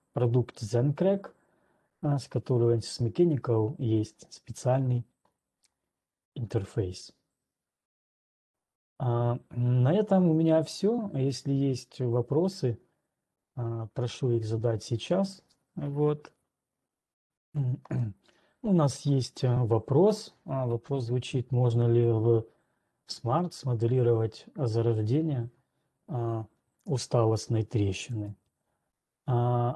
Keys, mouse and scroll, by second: 8.1 click, 9.6-10.1 scroll, 10.1-13.0 scroll, 27.1-27.7 scroll, 27.7 alt+Tab, 27.7-28.1 scroll, 28.8 alt+click.